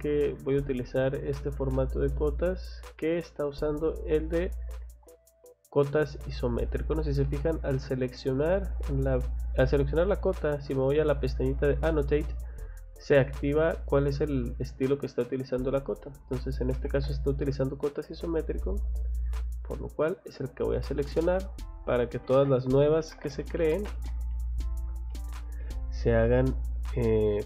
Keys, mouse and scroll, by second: 2.4 click, 3.9 Escape, 4.8 Escape, 6.5 click, 7.9 click, 8.2 click, 10.5 click, 10.7 click, 16.7 Escape, 17.1 Escape, 18.0 click, 19.9 click, 20.9 middle click, 21.3 middle click, 21.7 middle click, 22.6-23.7 typing, 24.6 scroll up 2, 25.1 middle click, 25.8 scroll up 2, 27.1 click.